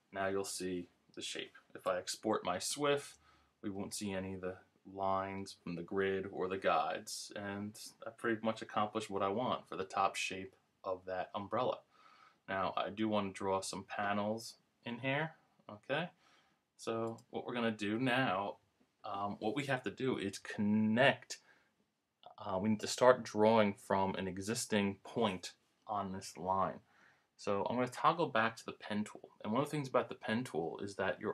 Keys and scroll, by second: 2.7 super+Return.